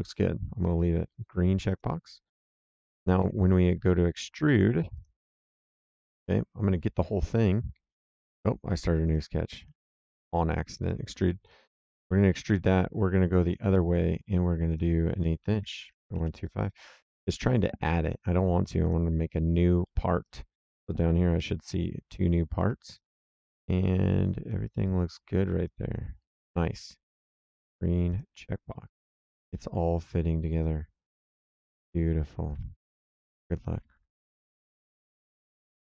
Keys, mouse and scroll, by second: 1.6 click, 2.5 right click, 3.1 s, 4.9 click, 5.9 click, 9.0 click, 10.0 s, 10.7 click, 13.4 click, 14.6 click, 15.6 KP_1, 15.8 KP_2, 15.9 KP_5, 16.1 KP_Enter, 18.8 click, 19.8 middle click, 20.2 right click, 22.5 middle click, 22.9 right click, 28.0 click, 28.6 middle click, 29.3 right click.